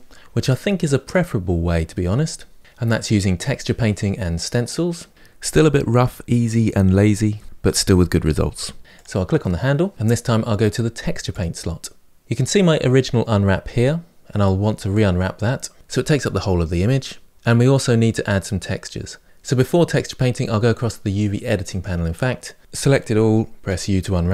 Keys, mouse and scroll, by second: 8.8 click, 9.9-11.1 shift+middle drag, 11.1-15.4 drag, 21.5 click, 22.6 a.